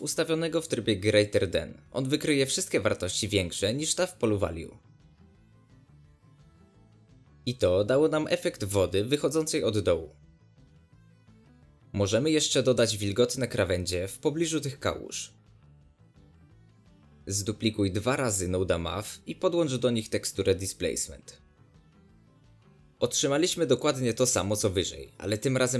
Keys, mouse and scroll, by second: 2.7 click, 3.7 click, 4.2-6.5 drag, 7.4 scroll down 1, 7.5-7.9 middle drag, 7.9-8.4 scroll up 2, 8.1 shift+middle click, 8.4 middle click, 9.2-11.1 shift+drag, 12.1 scroll down 1, 12.2-13.7 middle drag, 13.7 scroll up 3, 15.4 scroll down 1, 15.8-17.0 shift+middle drag, 17.0 shift+d, 21.6 click, 23.3-23.8 middle drag, 23.8 ctrl+shift+click, 24.3 ctrl+shift+click, 24.7 ctrl+shift+click.